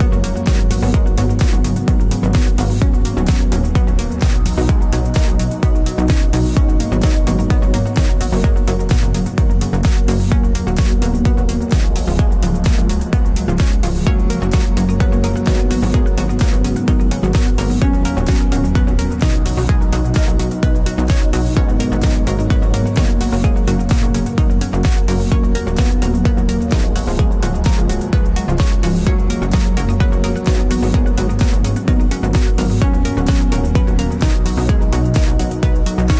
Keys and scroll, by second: 32.4 ctrl+j.